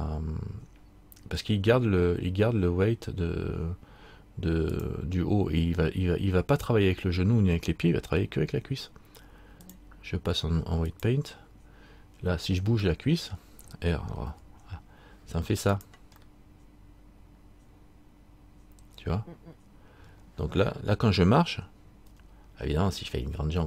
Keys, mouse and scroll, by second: 4.9 click, 9.8 click, 11.2 click, 13.1 middle click, 14.5 r, 17.9 middle click, 22.3 r.